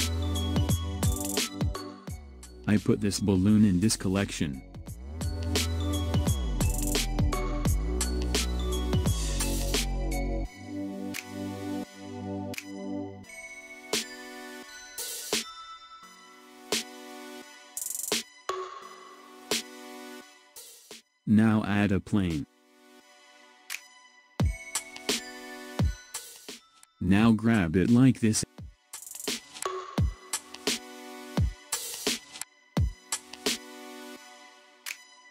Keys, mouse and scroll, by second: 3.4 click, 8.1 click, 12.0 click, 13.0 click, 13.9 scroll down 4, 15.5-18.6 middle drag, 20.9 shift+a, 23.2-24.5 middle drag, 24.5-25.3 scroll up 1, 26.8 KP_1, 28.4 click.